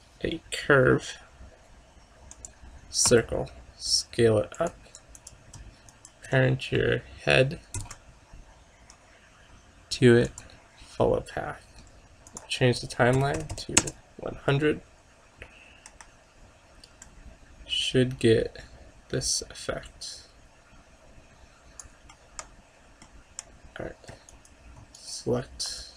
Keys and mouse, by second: 3.2 s, 5.3-6.4 right drag, 7.9 ctrl+p, 12.4-14.1 drag, 13.6 KP_0, 15.9 KP_0, 17.1-19.0 drag, 22.2-24.4 middle drag, 24.4-25.9 right drag.